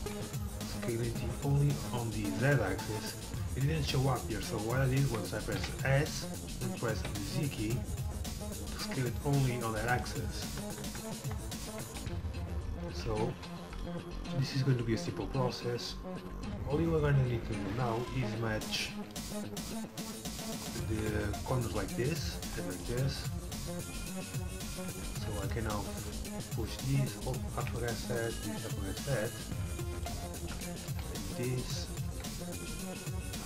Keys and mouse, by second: 5.6 s, 10.9-13.7 typing, 15.6-16.7 drag, 17.2 click, 18.8 ctrl+r, 22.5 ctrl+r, 24.9 a, 25.2 c, 26.2-28.0 drag, 27.6 a, 27.8 c, 29.9 middle click, 30.7 a.